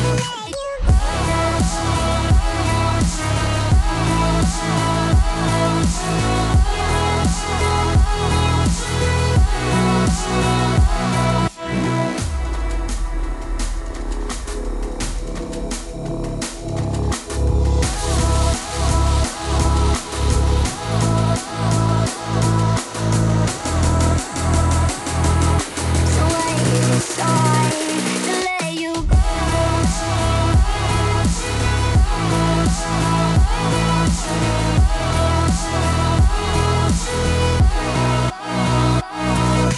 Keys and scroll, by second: 39.1 s.